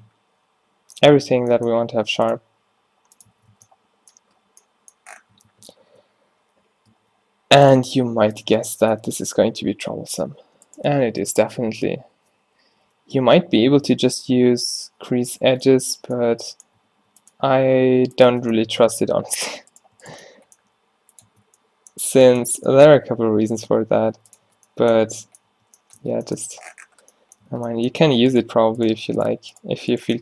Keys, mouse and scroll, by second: 1.2 Tab, 1.9 ctrl+r, 3.6 Tab, 5.4 Tab, 5.9 ctrl+e, 7.1 ctrl+r, 8.5 Tab, 9.2 Tab, 10.2 g, 11.3 o, 11.8 o, 12.7 g, 15.6 Tab, 16.4 Tab, 17.1 ctrl+r, 18.4 Tab, 19.3 Tab, 20.7 g, 21.4 Tab, 22.6 Tab, 23.1 Tab, 23.4 Tab, 23.7 g, 24.5 Tab, 25.5 Tab, 26.0 Tab, 27.5 Tab.